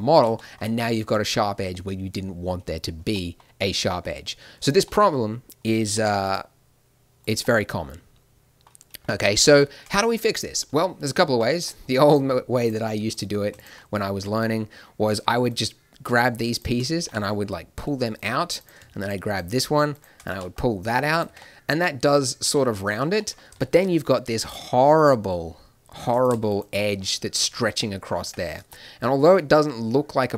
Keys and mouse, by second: 3.1 middle click, 5.9 ctrl+r, 9.6 middle click, 14.1 a, 14.4 middle click, 17.0 g, 20.3 g, 21.2 Tab, 22.9 Tab, 27.0 click, 28.2 Tab.